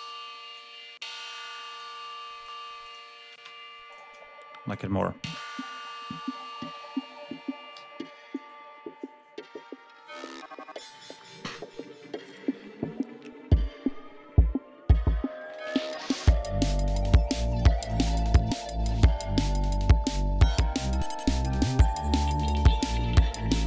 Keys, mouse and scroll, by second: 0.9 scroll down 1, 2.6 click, 3.3 space, 3.7 click, 4.5 click, 5.0 space, 5.5 ctrl+scroll down 2, 6.3 ctrl+scroll up 2, 7.5 g, 7.9 scroll down 1, 12.6-13.4 scroll down 2, 14.2-15.0 scroll down 4, 15.3-16.1 scroll up 2, 16.5 scroll down 2, 17.4-17.7 scroll up 2, 19.8 ctrl+scroll down 2, 22.0 click, 23.3 click.